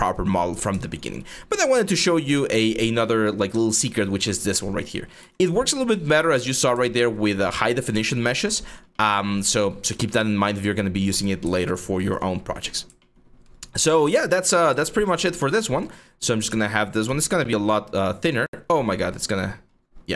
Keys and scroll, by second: 1.0 1, 4.3 3, 4.8 q, 6.1 1, 14.1 3, 16.1 w, 16.7 r.